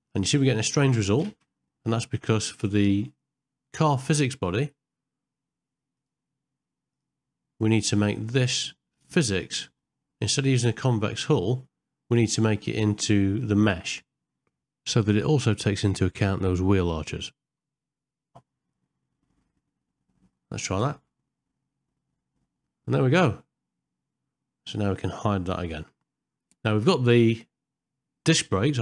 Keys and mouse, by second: 1.3 shift+Left, 4.5 click, 6.9 click, 9.5 click, 12.7 click, 13.9-15.0 drag, 18.3-19.4 middle drag, 20.9 space, 25.8 h.